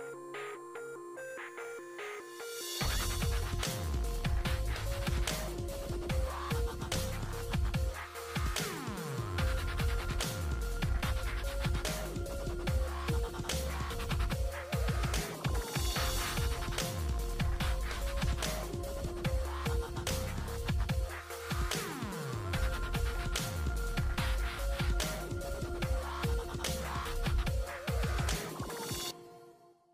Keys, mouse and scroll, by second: 0.2 ctrl+a, 2.4 m, 5.0-11.8 drag, 11.6-12.5 typing, 13.8 Return, 15.8 click, 19.4 alt+w, 21.6-25.8 drag, 25.7 typing.